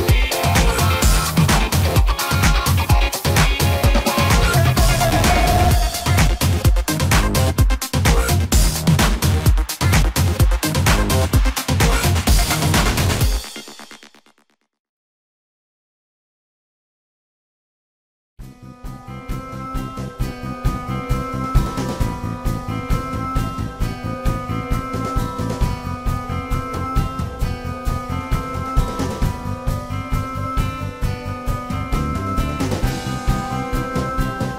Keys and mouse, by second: 1.6 drag, 1.9 drag, 2.1-3.1 middle drag, 3.1 click, 3.3-5.9 middle drag, 5.9-8.5 drag, 6.9 middle drag, 8.7-9.3 drag, 11.0-11.7 drag, 15.1-17.9 drag, 17.9-27.9 middle drag, 23.8 click, 25.7-27.3 drag, 27.9-28.8 drag, 28.8-31.1 middle drag, 33.0-34.5 middle drag.